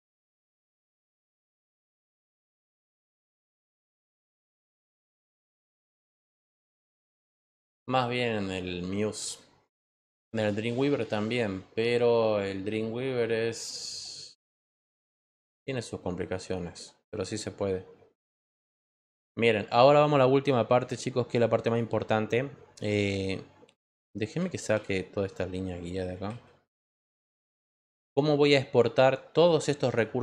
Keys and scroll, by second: 24.7 ctrl+h, 26.2 ctrl+h.